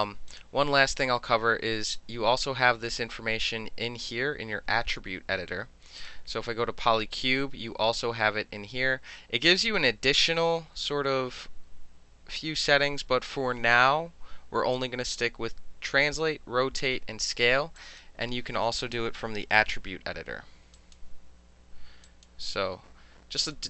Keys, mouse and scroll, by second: 6.0 click, 17.7 click, 18.9 KP_5, 19.3 KP_Enter, 20.7 click, 21.0 KP_5, 21.4 KP_Enter, 22.0 click, 22.3 KP_5, 22.7 KP_Enter, 23.4 click.